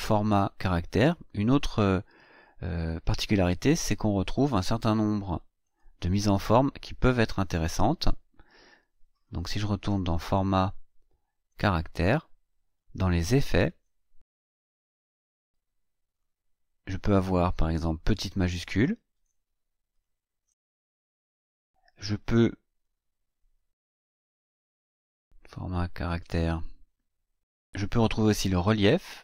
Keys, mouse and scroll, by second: 5.0 click, 8.2-8.5 ctrl+scroll up 1, 10.2 click, 11.5 click, 12.8-13.9 drag, 14.3 click, 14.8 click, 16.1 click, 18.0 click, 19.9 click, 22.8-23.1 ctrl+scroll up 2, 24.7 click, 26.2 click, 28.3 click.